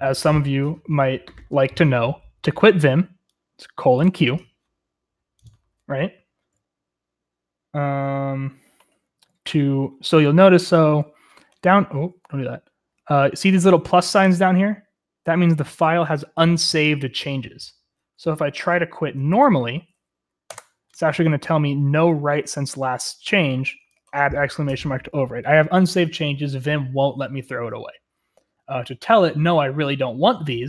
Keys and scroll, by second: 18.6 shift+Return, 18.6-21.0 typing.